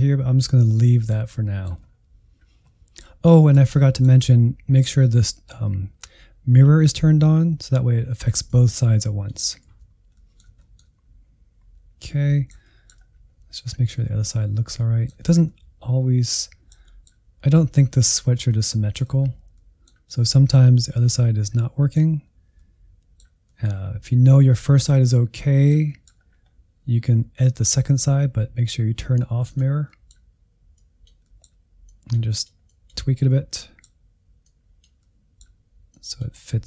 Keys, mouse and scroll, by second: 1.8-2.7 scroll down 4, 2.7-8.5 middle drag, 8.5-9.6 drag, 9.6 ctrl+z, 10.1 middle click, 11.0 scroll down 2, 11.8 scroll up 1, 12.0-13.0 middle drag, 13.0-13.6 scroll up 3, 13.6-15.3 middle drag, 15.3 scroll down 2, 15.5-17.3 middle drag, 17.3-17.8 scroll up 3, 17.8 middle click, 18.2-18.7 scroll up 1, 18.7 shift+middle click, 19.2-19.6 scroll up 1, 19.6-23.7 middle drag, 23.7-24.2 scroll down 5, 24.2-26.2 middle drag, 26.2-29.2 scroll up 2, 29.4 click, 29.9 middle click, 30.8 click, 31.3 middle click, 31.9-33.3 drag, 33.3-34.4 middle drag, 34.4 click, 35.0 middle click, 35.9 click, 36.4-36.6 middle drag.